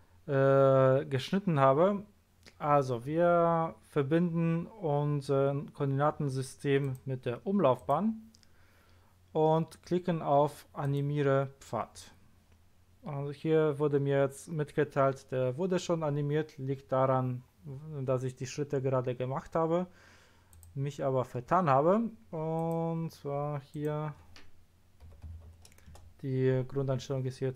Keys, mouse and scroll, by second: 6.8 click, 7.8 click, 10.8 click, 20.5 click, 22.6 click, 23.7 click, 25.0 KP_2, 25.2 KP_5, 25.4 KP_0, 25.9 Return.